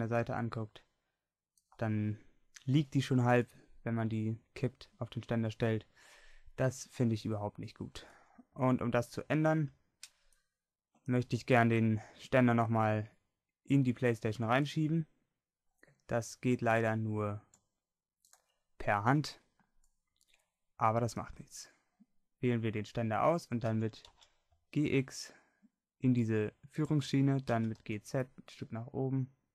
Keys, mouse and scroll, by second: 7.1 middle click, 8.4-11.6 middle drag, 23.7 g, 27.6 g.